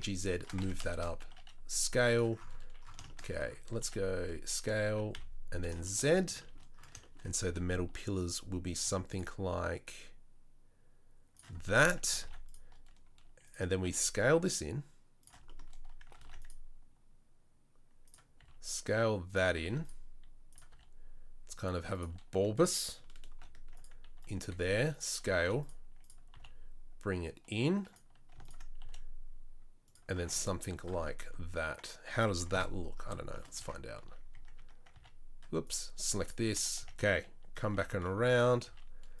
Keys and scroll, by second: 0.5 Tab, 1.3 s, 3.8 s, 4.6 s, 8.7 ctrl+r, 12.2 ctrl+r, 13.8 s, 16.1 ctrl+r, 18.4 s, 19.6 ctrl+r, 20.7 s, 23.3 ctrl+r, 24.4 s, 25.4 ctrl+r, 26.3 s, 28.8 s, 30.2 Tab, 32.5 KP_7, 33.6 Tab, 34.0 Tab, 34.3 Tab, 34.5 Tab, 34.9 a, 36.5 Tab, 36.8 a, 37.7 g, 38.6 s.